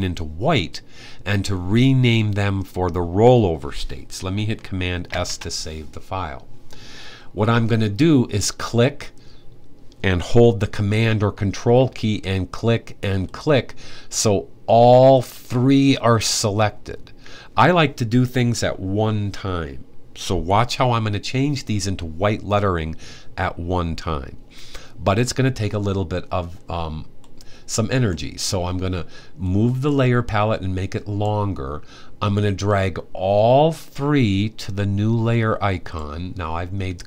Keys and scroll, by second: 4.8 super+s.